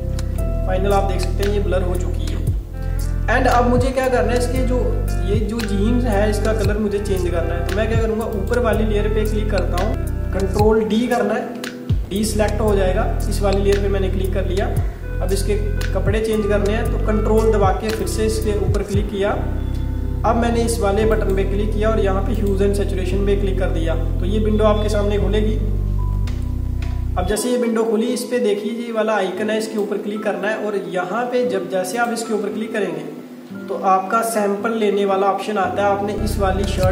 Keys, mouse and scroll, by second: 0.7 alt+scroll up 1, 1.5 alt+scroll up 1, 2.2 alt+scroll down 1, 4.9 alt+scroll up 1, 8.4 click, 11.5 ctrl+d, 12.7-13.0 alt+scroll up 1, 14.5 alt+scroll down 1, 14.8 alt+scroll up 1, 18.1 ctrl+click, 21.2 click, 26.3 super+KP_Add, 29.7 click, 33.6 super+KP_Add.